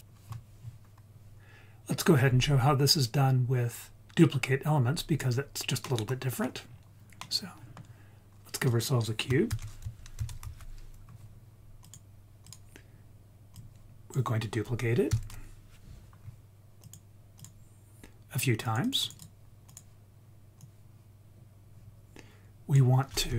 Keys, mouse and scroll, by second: 5.8 middle click, 6.6-7.8 scroll down 2, 7.1 middle click, 8.1-8.6 scroll up 1, 8.6 click, 9.5 shift+a, 13.5-16.9 drag, 17.4 click, 18.6 click, 18.8 click, 19.0 click, 19.6 click, 20.6 click, 20.9-23.3 drag.